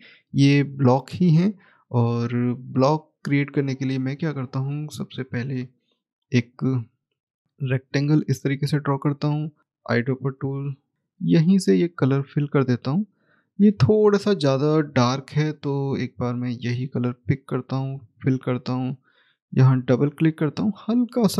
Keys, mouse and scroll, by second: 6.4 click, 7.2 scroll up 1, 7.4 click, 12.1 right click, 16.3 click, 19.8 double click.